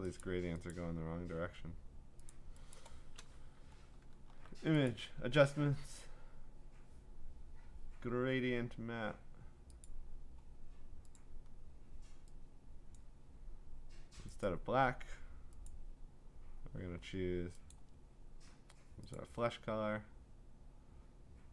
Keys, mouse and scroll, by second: 0.2 click, 0.7 click, 2.3 click, 2.7 click, 3.4 middle click, 3.9 middle click, 4.1 middle click, 4.2 middle click, 4.2-4.9 scroll, 4.9 click, 9.9 click, 11.2 click, 14.4 click, 15.7 click, 17.7 click, 19.2 click.